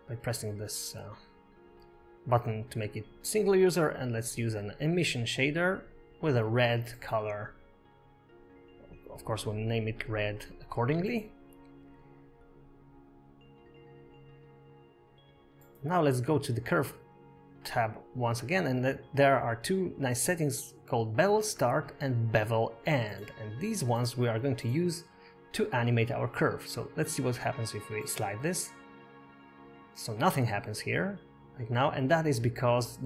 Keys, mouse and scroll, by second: 0.4 click, 0.9 click, 3.6 click, 4.2 click, 8.8 click, 11.7 click, 16.7 click, 18.3 scroll down 5, 19.4-19.8 scroll down 4, 29.2 click, 32.7 click.